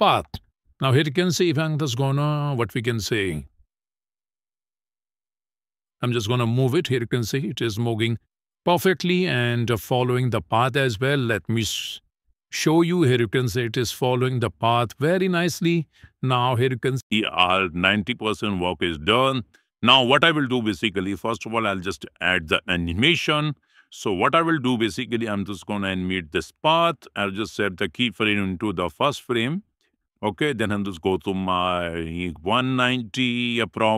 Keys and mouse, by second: 1.4 shift+middle click, 1.7 middle click, 5.7-9.2 drag, 10.4 middle click, 11.2 shift+middle click, 13.0-15.6 drag, 16.2 shift+middle click, 17.2 middle click, 18.2 shift+middle click, 19.2 shift+middle click, 26.0 click, 28.7 click, 30.0 click.